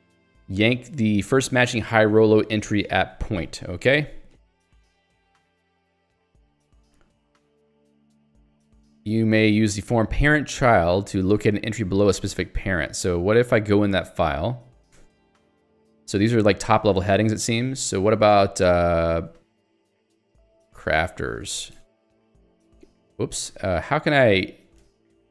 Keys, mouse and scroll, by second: 0.3 k, 3.9 j, 6.0 ctrl+d, 7.1 k, 8.9 j, 9.6 l, 11.8 h, 13.7 k, 14.0 ctrl+alt+j, 15.0 Return, 15.7 k, 16.8 ctrl+alt+j, 17.6 ctrl+g, 18.0 i, 18.3 shift+Return, 19.1 Escape, 19.3-22.4 typing, 22.5 alt+l, 23.3 Escape, 23.6 u, 24.9 alt+x.